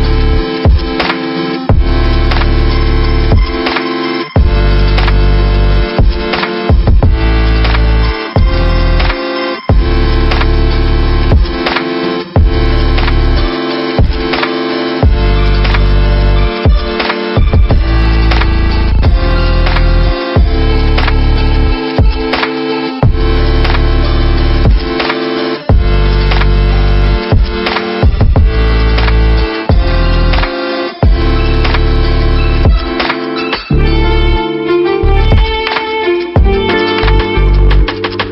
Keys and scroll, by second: 0.0 ctrl+v, 11.1 v, 14.9 ctrl+t, 17.3 Return, 18.6 Up, 19.3 Up, 19.4 Up, 19.5 Up, 24.7 ctrl+BackSpace, 38.2 ctrl+=.